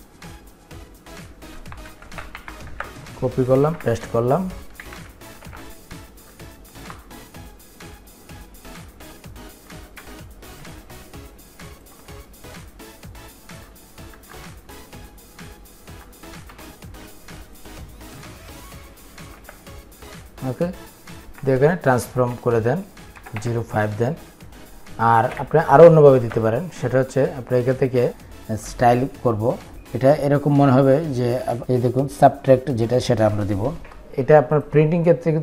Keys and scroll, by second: 2.3 ctrl+c, 3.4 ctrl+v.